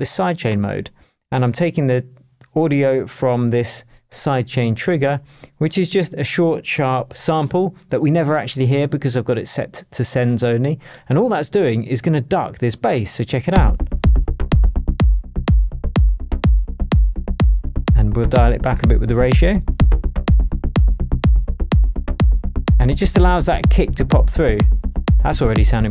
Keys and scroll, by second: 13.5 space.